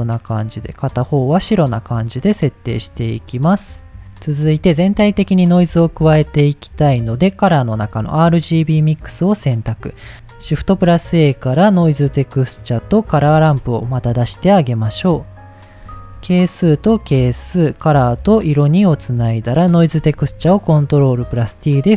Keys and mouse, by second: 0.8 click, 1.5 click, 3.0 middle click, 5.2 middle drag, 5.7 shift+a, 10.6 shift+a, 13.3 shift+a, 15.8 middle click, 16.4-17.6 drag, 18.0-18.9 drag, 19.1 click, 19.6 click, 20.2 ctrl+t, 20.6 middle click, 21.6-21.9 drag.